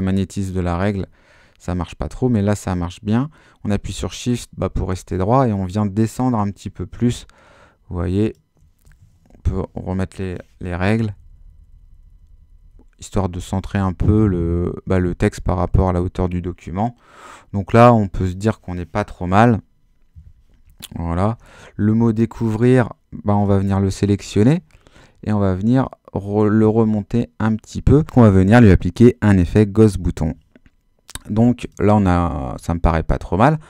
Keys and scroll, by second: 0.0 super+z, 9.4 shift+super+h, 11.0 Down, 13.2 Up, 13.5 Down, 14.1 Up, 14.6 Down, 15.0 Up, 15.3 Down, 17.8 Up, 21.2 super+h.